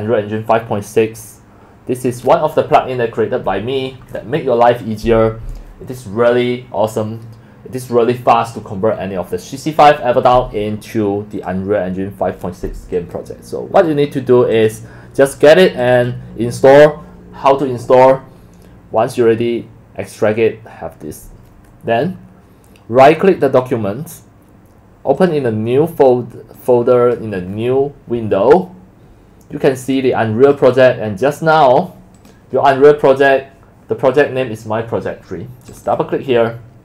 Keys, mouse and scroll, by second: 11.3 click, 12.9 click, 13.8 click, 14.5 click, 15.4 click, 15.8 click, 15.9 click, 18.2 drag, 21.1 click, 23.4 right click, 25.1 click, 26.6 click, 29.8 click, 30.4 click, 30.6 click, 32.1 click, 35.7 click, 35.8 click.